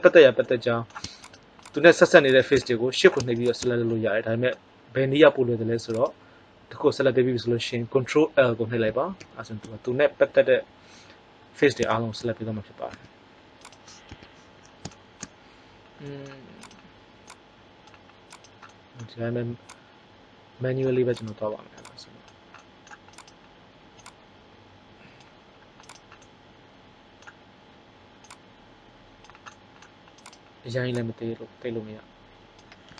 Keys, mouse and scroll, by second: 1.1-2.3 right drag, 2.7 middle click, 9.1 ctrl+l, 12.8 s, 14.1 KP_1, 16.5 right click, 17.2 click, 18.6 click, 18.6-20.3 right drag, 19.6 click, 21.1 right click, 22.5 middle click, 23.0-24.6 drag, 26.2 middle click, 28.2 click, 30.9 click.